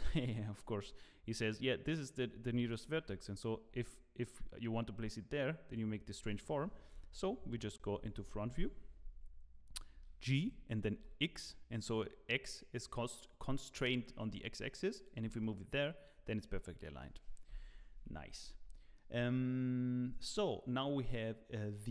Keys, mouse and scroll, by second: 0.7 scroll up 1, 9.2-9.7 scroll up 1, 9.8 shift+middle click, 10.4 g, 17.9 Tab, 17.9 middle click, 17.9-18.4 scroll down 4, 17.9 KP_1, 18.4 scroll up 3, 18.7 shift+middle click.